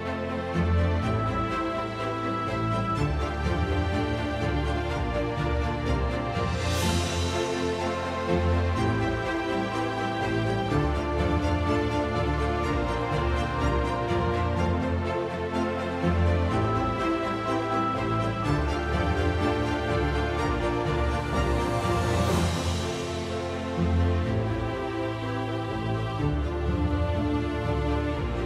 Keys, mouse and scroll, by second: 0.6 click, 2.4-3.4 ctrl+9, 3.5 ctrl+9, 8.0 click, 8.9 F2, 10.9 click, 12.3 click, 12.8 F1, 13.2 click, 15.1 click, 16.0 ctrl+d, 17.3 ctrl+click, 17.9 h, 21.0 ctrl+click, 21.8 F2, 22.9 click, 24.0 click, 25.0 click, 26.7 click, 27.7 click, 27.9 F1.